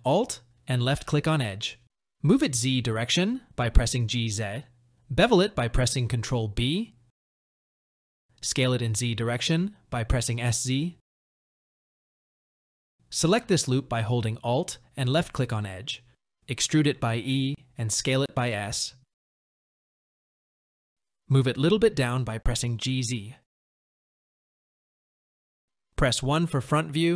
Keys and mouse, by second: 0.4 g, 6.6 ctrl+b, 9.9 s, 12.0 click, 12.5 middle click, 14.9 alt+click, 20.1 KP_3, 21.0 g, 25.6 KP_1.